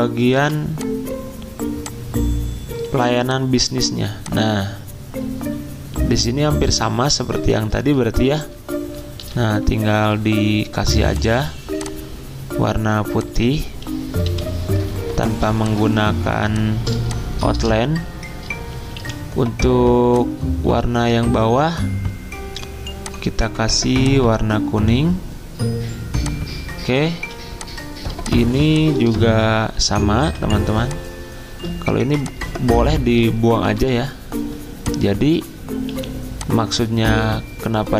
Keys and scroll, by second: 5.6 v, 9.2 d, 14.2 /, 15.3 z, 16.4 space, 17.5 v, 19.0 t, 27.1 z, 29.6 b, 36.8 Delete.